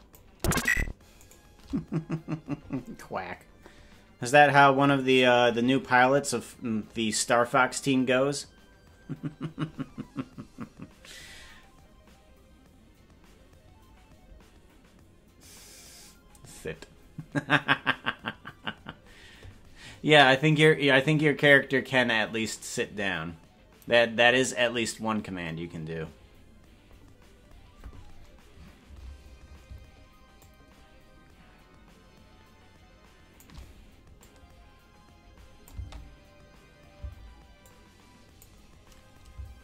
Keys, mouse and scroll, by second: 1.3 shift+right click, 30.3-33.4 shift+drag, 34.2-37.1 drag, 36.9 space, 37.6 click.